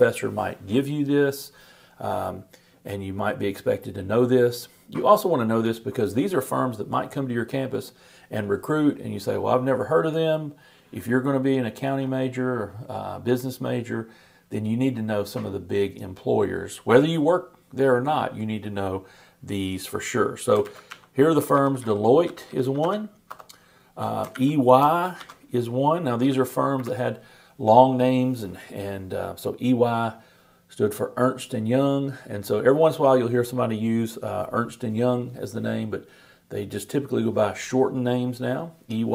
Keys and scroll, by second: 20.4-21.4 typing, 24.2 shift+Return, 24.3 shift+e, 25.2 shift+y.